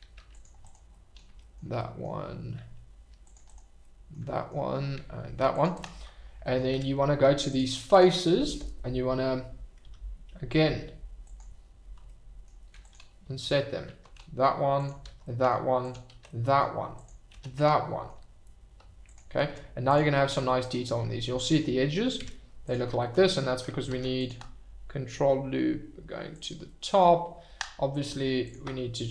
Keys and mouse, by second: 0.0 ctrl+r, 0.6 click, 1.0 middle click, 1.8 middle click, 2.9 ctrl+r, 3.4 click, 3.9 click, 5.2 ctrl+r, 5.7 click, 6.7 Tab, 11.2 click, 12.2 middle drag, 12.9 click, 13.8 shift+r, 14.1 middle drag, 14.7 click, 15.0 shift+r, 15.2 middle drag, 15.8 click, 16.2-16.6 middle drag, 17.0 click, 17.3 shift+r, 17.6-18.1 middle drag, 19.1 click, 19.4 Tab, 20.4-20.9 middle drag, 21.4 shift+right drag, 22.2 Tab, 23.9 ctrl+r, 26.3 click, 26.7 middle click.